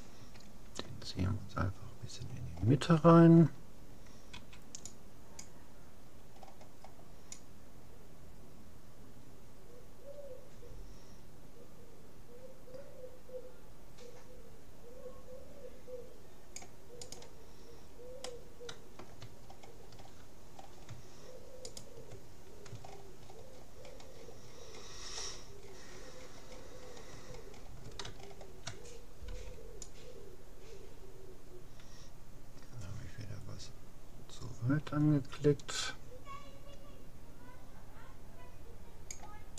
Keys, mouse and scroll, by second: 0.2 a, 1.4 middle click, 2.6-3.8 middle drag, 4.4 c, 17.6 middle click, 18.2-20.0 middle drag, 21.8-23.4 right drag, 27.2-30.2 middle drag, 29.4 c.